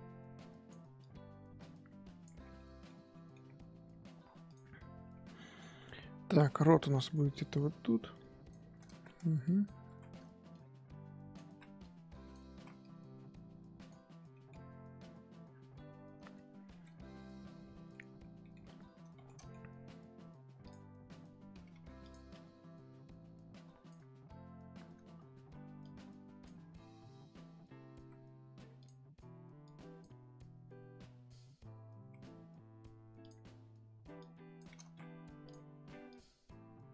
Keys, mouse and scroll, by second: 2.4 scroll down 2, 2.5 middle click, 3.0 scroll up 2, 3.1 middle click, 3.3 scroll down 1, 3.4-4.5 scroll up 3, 4.5 click, 5.2 middle click, 5.7-6.2 scroll up 1, 6.2 f, 7.1-8.2 middle drag, 8.2 click, 8.9 ctrl+z, 9.0 middle click, 9.4 click, 9.9 ctrl+z, 10.5-11.5 drag, 11.5 ctrl+z, 11.8 click, 12.5 ctrl+z, 12.8-14.1 drag, 14.1 scroll down 2, 14.3 middle click, 14.7-15.5 scroll down 4, 15.5-16.7 scroll up 4, 16.7 shift+middle click, 16.9-17.6 scroll up 3, 17.6 middle click, 18.2 scroll down 2, 18.4 middle click, 18.6-19.1 scroll up 1, 19.1 shift+middle click, 19.6-20.7 scroll up 1, 20.7 click, 21.7 f, 22.3-28.5 drag, 28.5 x, 29.6-32.1 drag, 32.1 x, 33.2 click, 34.1 click, 34.8 ctrl+z, 35.5 click, 36.0-36.9 drag.